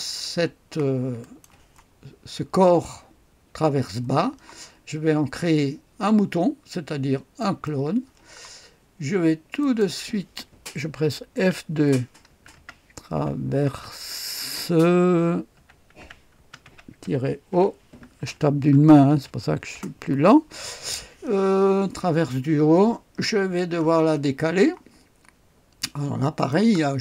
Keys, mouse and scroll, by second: 1.2 click, 7.4 click, 8.4-9.6 scroll down 1, 9.6-10.6 drag, 11.4 F2, 12.3-13.5 typing, 15.3-20.2 typing, 23.9-26.4 scroll down 1, 26.4 click, 26.8-27.0 scroll down 1.